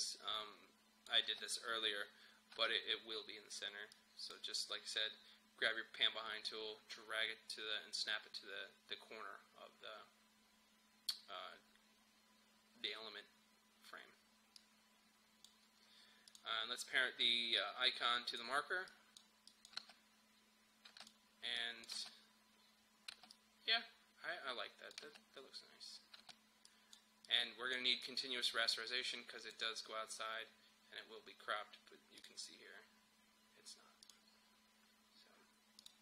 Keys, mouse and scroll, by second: 0.1 click, 1.3 space, 3.9-8.7 drag, 14.6-18.9 drag, 19.8 space, 21.1 click, 21.9 space, 23.3-25.0 drag, 25.0 space, 26.7-32.0 drag, 32.3 click.